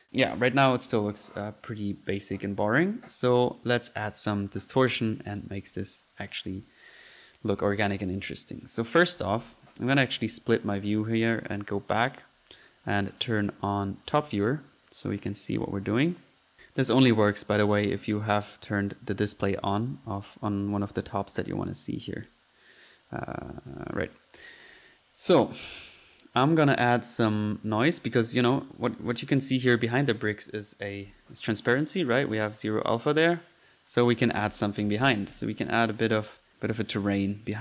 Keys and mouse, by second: 0.9-1.4 drag, 2.2 middle click, 3.4 click, 4.4 right click, 4.7 right click, 4.9 click, 5.2 click, 5.7 click, 9.4-10.2 drag, 10.4-10.9 drag, 11.2-11.9 typing, 12.4 click, 13.1 click, 14.1-14.5 drag, 15.5-16.3 drag, 16.5 click, 17.5 drag, 18.8-19.2 drag, 19.4-19.8 drag, 20.0 middle click, 20.7-21.1 drag, 21.8-22.2 drag, 22.2 drag, 23.3 drag, 23.6-24.3 typing, 23.8-24.3 drag, 24.7 click, 24.9 click, 28.4-29.4 typing, 28.7 click, 33.1-35.5 typing, 36.0-36.3 drag, 36.4 click.